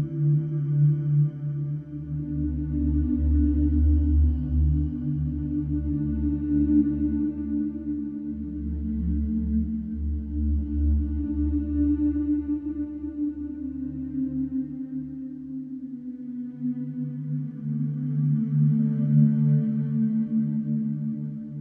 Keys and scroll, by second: 0.2 ], 1.2 4, 3.9 ], 5.7 4, 10.2 Return, 15.0 3, 18.4 4, 20.7 3.